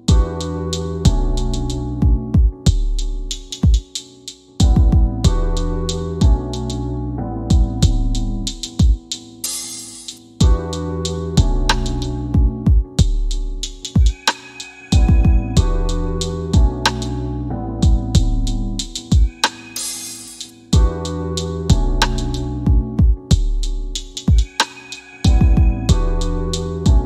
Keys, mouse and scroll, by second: 1.6 m, 5.1 click, 8.3 F10, 12.7 click, 20.3 click, 23.9 KP_2, 25.9 click.